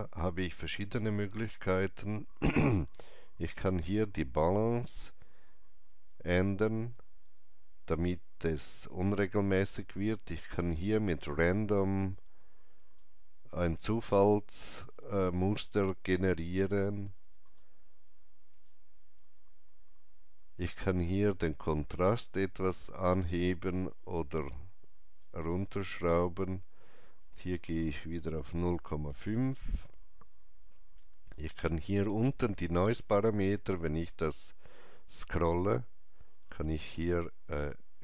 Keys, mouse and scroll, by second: 1.4-3.1 drag, 1.4 scroll down 1, 3.1-3.5 scroll up 1, 5.2-11.0 drag, 11.3-13.7 drag, 11.3-12.7 scroll up 1, 17.4 click, 21.5-28.7 drag, 28.7 KP_5, 29.0 KP_Enter, 31.7 KP_Enter, 31.7 click, 31.7 KP_5, 33.5 scroll down 1, 35.4 click, 36.3 scroll down 1.